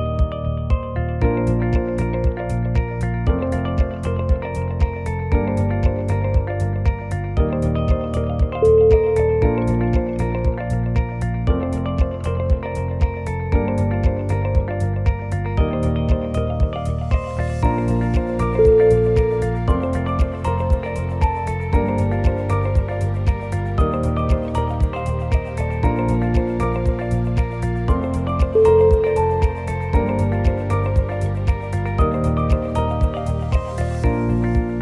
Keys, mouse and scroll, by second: 0.4 g, 1.3 e, 2.1 g, 2.6 g, 4.3 g, 5.3 g, 6.3 g, 8.6 g, 9.7 g, 10.4 g, 11.3 e, 12.2 g, 13.8 e, 14.9 e, 15.9 g, 17.2 e, 18.1 g, 19.8 shift+middle click, 20.2 shift+middle click, 20.4 e, 21.0 g, 22.5 e, 23.4 g, 25.0 g, 26.0 g, 27.0 g, 27.7 g, 29.6 alt+click, 30.0 g, 31.4 click, 32.1 middle click, 32.7 shift+click, 33.1 f, 33.3 click, 34.4 middle click, 34.5 middle click.